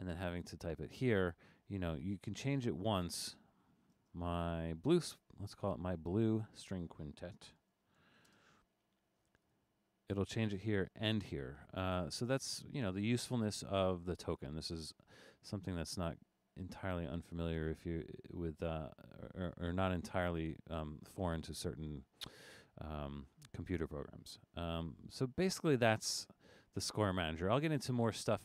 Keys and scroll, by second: 3.9 space, 4.5 Left, 7.1-8.6 typing.